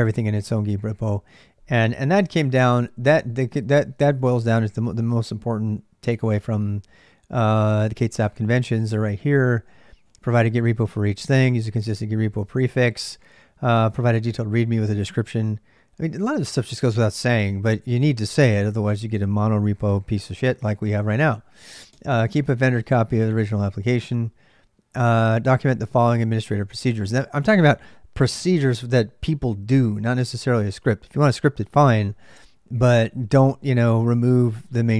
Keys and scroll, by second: 2.1 ctrl+j, 3.1-6.5 typing, 9.3 j.